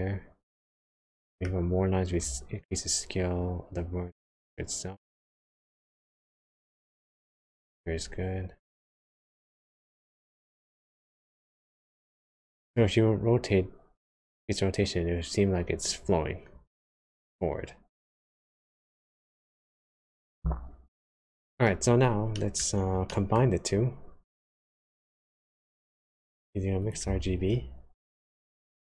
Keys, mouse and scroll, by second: 1.0 middle click, 1.5-2.0 scroll up 3, 2.6 shift+click, 12.7 click, 20.9 middle click, 22.4 middle click, 22.8 scroll down 1, 23.1 middle click, 24.4 click, 25.3 click, 26.8 click, 27.2 shift+a.